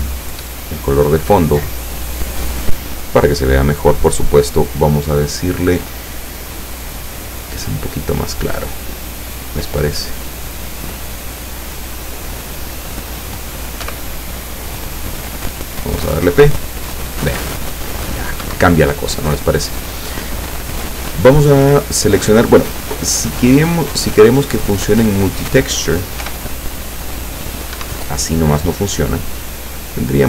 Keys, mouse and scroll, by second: 3.1 click, 5.2-5.6 scroll up 1, 6.8 click, 8.0-11.2 drag, 13.9 p, 18.4 Escape, 22.8 click, 24.6 click, 26.3 p, 27.8 Escape, 29.5 click.